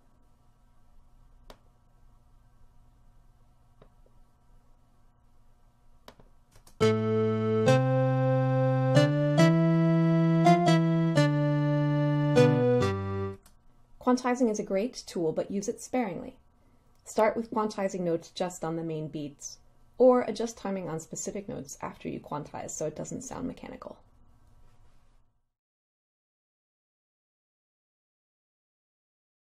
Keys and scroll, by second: 6.7 space, 13.6 space.